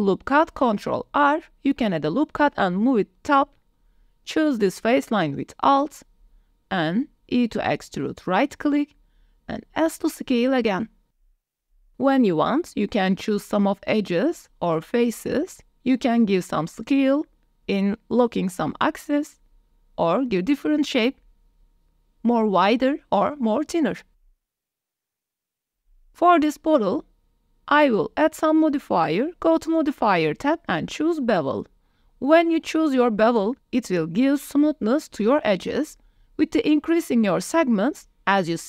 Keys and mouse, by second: 2.9 click, 3.6 3, 6.8 e, 8.9 s, 11.0 middle click, 11.3 click, 11.3 z, 11.8 click, 13.2 3, 13.8 alt+click, 15.0 s, 15.4 z, 17.6 click, 18.6 Tab, 19.8 alt+s, 23.1 click, 23.4 click, 24.0 Tab, 24.2 click, 24.4 click, 24.8 s, 25.0 shift+z, 25.7 click, 29.5-32.2 drag, 37.5 click, 38.3 click.